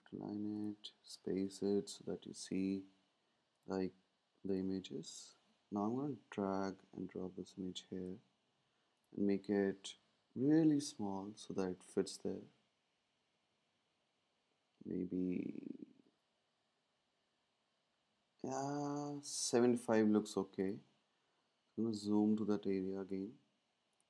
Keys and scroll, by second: 10.4 shift+Down, 10.7 shift+Down, 10.8 shift+Down, 11.0 shift+Down, 11.1 typing, 13.1 typing, 13.4 shift+Up, 19.0 shift+Up, 21.7 z.